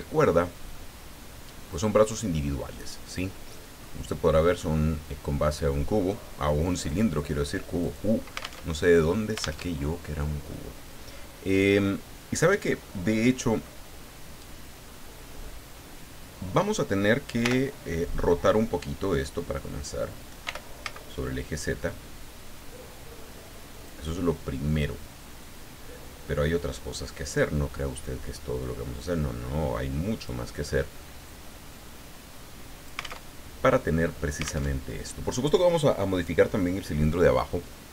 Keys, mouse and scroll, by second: 0.1-0.4 scroll down 2, 0.7-4.0 middle drag, 4.6-5.6 middle drag, 6.7 click, 7.8 right click, 8.6 alt+Tab, 9.6 alt+Tab, 17.4 l, 20.4 r, 20.8 z, 23.7 click, 25.4-27.1 drag, 29.0-30.4 drag, 31.3-33.2 drag, 33.2 alt+Tab, 34.7 alt+Tab.